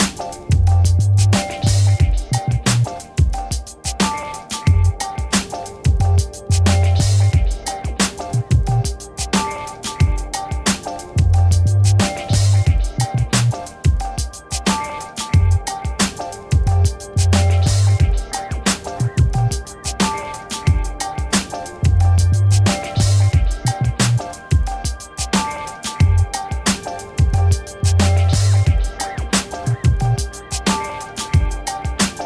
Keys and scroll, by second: 0.7-3.6 typing, 5.3 BackSpace, 7.8 F1, 8.2 Escape, 12.0-15.4 typing, 15.6 Return.